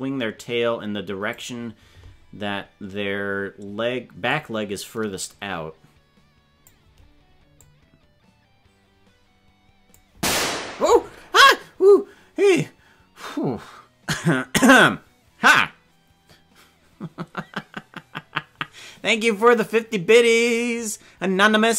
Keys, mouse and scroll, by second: 4.3-6.7 drag, 7.5-9.9 drag.